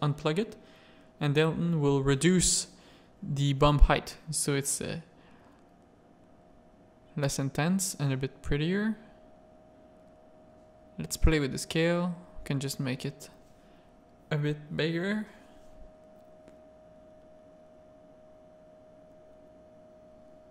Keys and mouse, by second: 0.0 middle click, 1.0-2.3 drag, 3.1 z, 5.1 middle click, 6.6 alt+a, 7.5 click, 8.3 click, 8.8 click, 9.1-10.1 middle drag, 10.1-15.5 drag, 17.6 middle click, 18.0 click, 19.7 click.